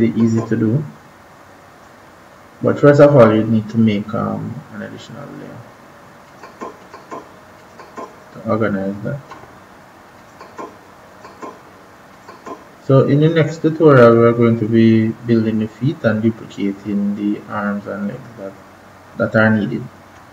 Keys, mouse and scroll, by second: 6.2 click, 10.1 click.